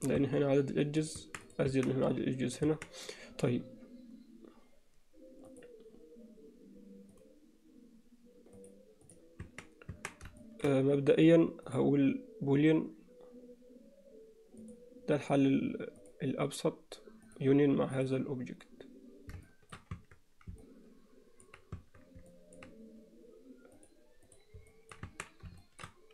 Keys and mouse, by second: 0.2 Tab, 1.2 Tab, 1.5 click, 1.7 Tab, 2.7 Tab, 5.5-7.3 drag, 8.6-9.2 drag, 9.5 Tab, 9.9 Tab, 10.4 alt+shift+middle drag, 11.7-14.7 drag, 16.0 drag, 17.3 click, 19.5 shift+middle drag, 20.0 Tab, 20.7 middle click, 22.1 Tab, 22.3 middle click, 23.8 click, 24.3 click, 24.7 middle click, 25.1 Tab, 25.6 shift+middle click.